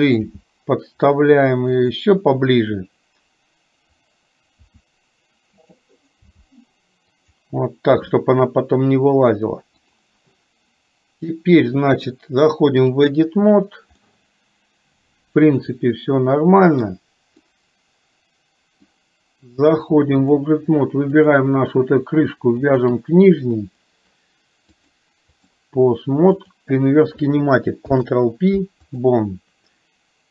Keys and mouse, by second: 0.4 g, 4.7 r, 6.4 g, 9.9 click, 11.9-13.0 drag, 14.0-16.9 middle drag, 17.5-18.9 middle drag, 19.8 click, 25.0 click, 27.9 ctrl+p.